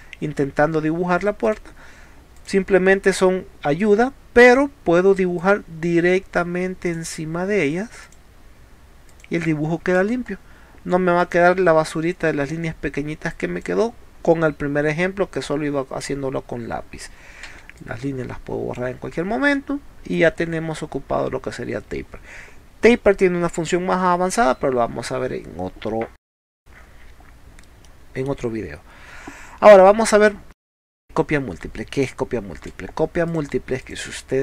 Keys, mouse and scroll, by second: 1.2 middle click, 1.5 click, 2.4 click, 4.5 click, 5.4 click, 6.9 click, 8.1 click, 9.1 click, 9.9 space, 10.2 middle click, 10.2 scroll up 1, 11.2 click, 13.3 click, 17.5 e, 17.8 click, 19.2 middle click, 19.2 scroll down 1, 19.6 middle click, 20.4 scroll up 2, 26.3 scroll down 2, 26.7-27.1 scroll up 2, 27.9 middle click, 30.0-30.4 scroll down 2, 30.9 scroll up 2, 31.8 middle click, 32.7 space, 33.3 click, 33.9 click.